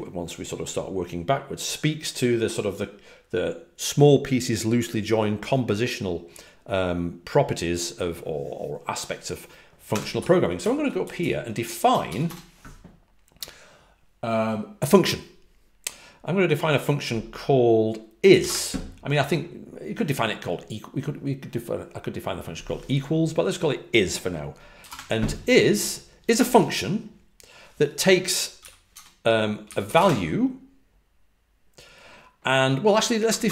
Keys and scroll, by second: 9.6-11.6 typing, 18.0-18.8 typing, 24.7 typing, 28.5-30.3 typing, 33.2-33.5 typing.